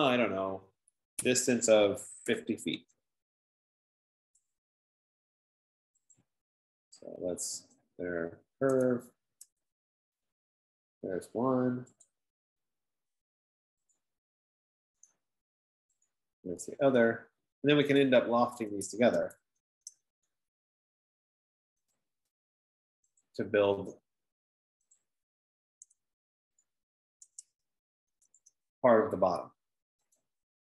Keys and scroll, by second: 0.0-3.3 typing, 19.8-20.7 typing, 28.0-29.0 typing.